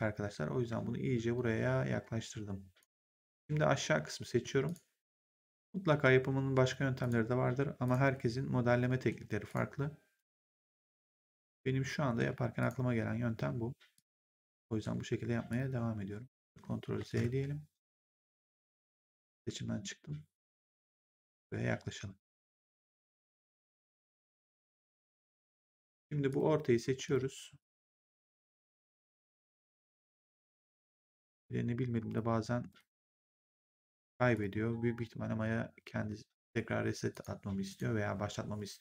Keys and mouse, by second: 3.1 click, 4.5 shift+click, 6.9 shift+click, 9.4 shift+click, 11.0 shift+click, 12.5 shift+click, 13.9 shift+click, 15.4 click, 16.9 ctrl+z, 18.3 shift+click, 20.5 click, 25.4 click, 26.2 shift+click, 29.6 right click, 31.0 right click, 32.0 shift+click, 37.0 click.